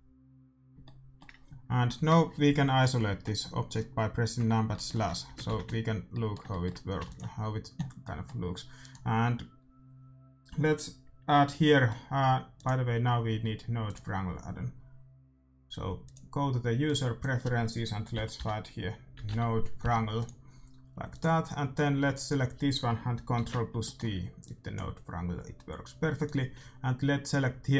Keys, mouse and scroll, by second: 1.8-4.3 middle drag, 4.6-10.2 middle drag, 5.5 shift+z, 7.0 ctrl+s, 8.7-10.7 right drag, 11.6-13.7 middle drag, 12.5-15.2 drag, 21.7-23.4 drag, 23.4 ctrl+t, 24.4-27.7 drag, 24.4-26.0 middle drag.